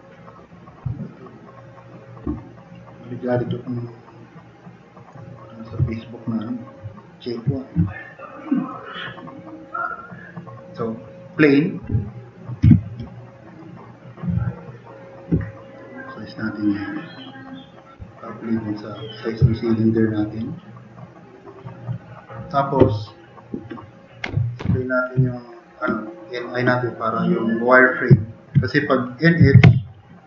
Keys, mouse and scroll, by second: 6.9 click, 12.7 t, 12.7 drag, 13.2 click, 15.8 drag, 16.5 click, 18.8 click, 19.5 drag, 20.2 click, 20.9-21.3 drag, 22.4 click, 24.2 n, 24.6 i, 25.3-25.7 drag, 28.2-28.5 drag, 29.2-30.2 typing.